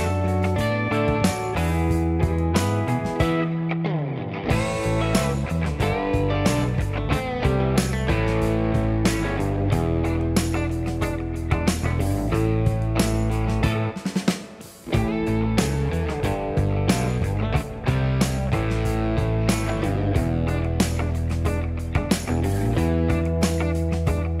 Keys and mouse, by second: 0.2 f, 0.8 f, 4.6-6.2 typing, 7.4 g, 8.3 k, 9.8 1, 10.1 2, 10.4 ctrl+click, 10.6 shift+middle click, 11.0-12.7 right drag, 11.8 d, 12.2 d, 12.8 shift+right click, 13.1 1, 13.4 shift+click, 13.5-14.7 right drag, 13.6 click, 13.7 g, 14.7 shift+click, 14.9-24.4 right drag, 15.0 j, 15.6 2, 18.4 d, 18.9 d, 19.7 alt+z, 21.3 1, 23.0 2, 23.1 click.